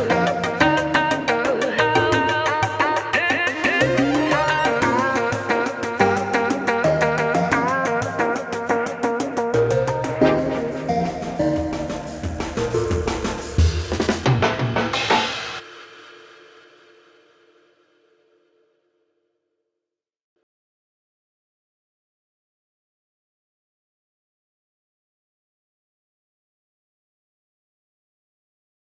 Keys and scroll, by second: 11.1 ctrl+space.